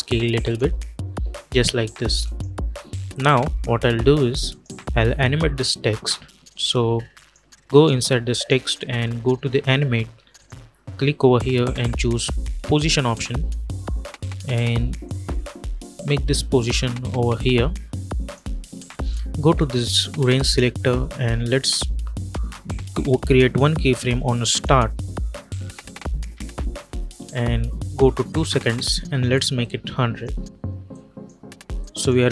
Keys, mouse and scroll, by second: 4.4 click, 12.5 click, 14.9-20.3 drag, 24.4 click, 26.2 =, 26.4 =, 28.2-31.7 drag, 32.0 space.